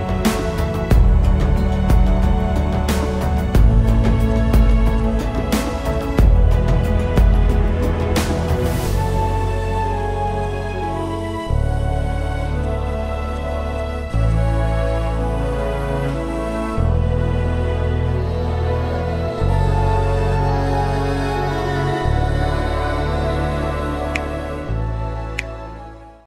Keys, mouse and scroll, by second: 0.3 alt+scroll up 1, 2.4 ctrl+s, 3.0 ctrl+shift+s, 5.8 double click, 9.0 ctrl+s, 9.7 ctrl+shift+s, 11.4-12.2 typing, 14.7-15.3 alt+scroll down 2.